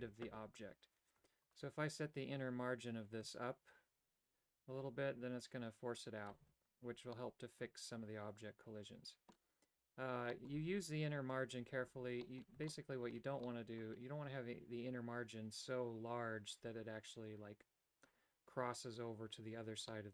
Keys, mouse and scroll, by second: 1.5 Tab, 1.6 right click, 3.5-6.5 shift+drag, 7.3-9.4 middle drag, 10.5 middle click, 12.3 middle click, 12.9 shift+middle click, 13.6 middle click, 20.0 middle click.